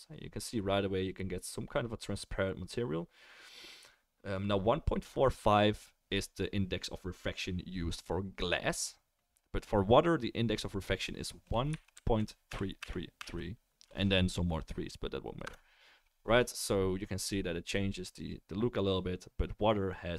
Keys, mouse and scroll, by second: 12.8 3.